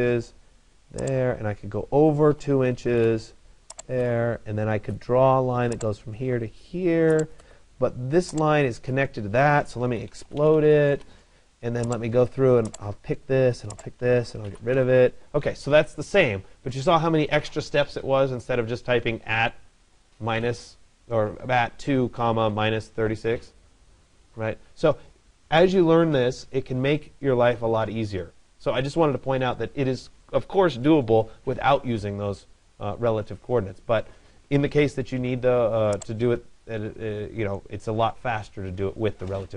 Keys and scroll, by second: 10.5 Return.